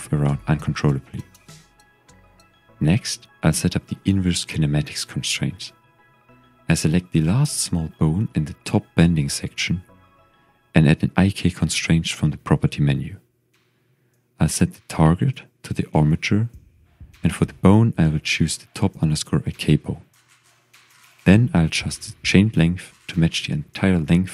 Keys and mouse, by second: 0.6 click, 0.7-1.2 middle drag, 2.0 KP_1, 3.2 z, 4.0-4.4 shift+middle drag, 5.8-6.2 shift+drag, 6.9 click, 8.0 shift+drag, 9.9 shift+drag, 10.0 typing, 11.0-12.1 drag, 14.8 click, 17.2-20.3 drag, 23.1-23.4 shift+drag.